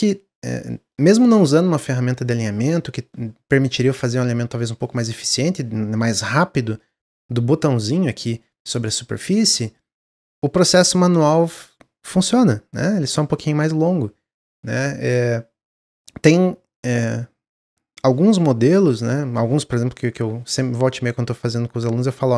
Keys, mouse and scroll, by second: 0.5-3.5 middle drag, 3.7-6.0 middle drag, 6.0 g, 7.0-8.5 middle drag, 8.5 g.